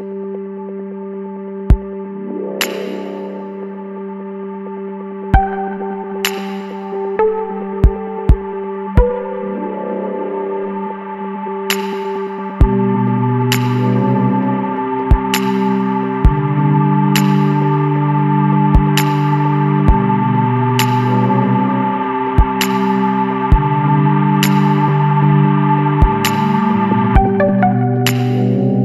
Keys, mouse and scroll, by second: 1.9 click, 4.4 click, 7.1 click, 8.2 KP_1, 8.7 KP_Decimal, 9.4 KP_4, 11.1 click, 11.8 click, 12.7 KP_6, 13.8 click, 15.1 click, 16.2 click, 17.2 click, 21.0 click, 22.0 KP_2, 22.3 KP_1, 22.5 KP_0, 25.4 click, 27.7 click.